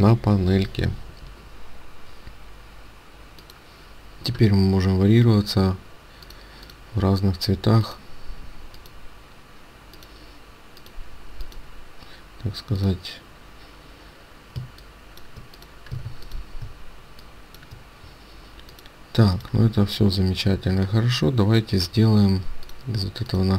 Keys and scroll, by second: 15.9 ctrl+space.